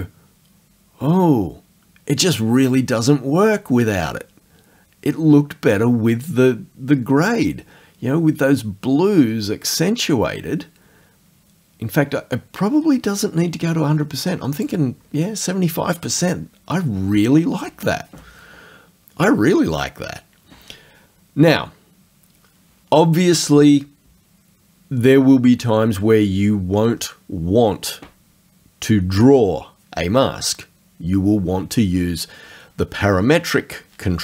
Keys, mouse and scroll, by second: 6.3-14.8 drag.